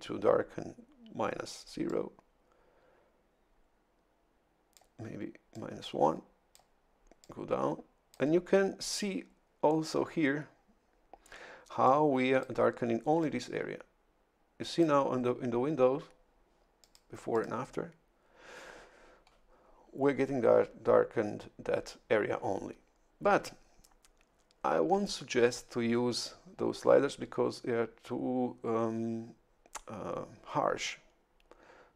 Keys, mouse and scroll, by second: 1.9-4.9 drag, 5.5-6.7 drag, 7.2-8.3 drag, 11.8 click, 13.2-15.0 drag, 16.8 click, 17.3 click.